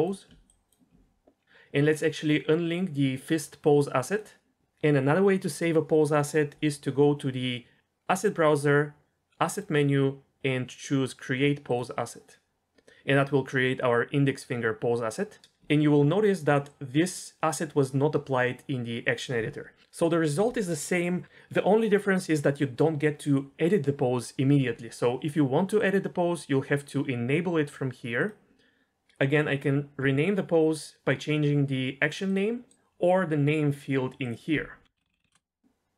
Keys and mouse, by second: 0.5 ctrl+click, 4.1 click, 9.5-11.8 drag, 25.8-28.3 drag, 32.3 click, 34.2-35.3 drag.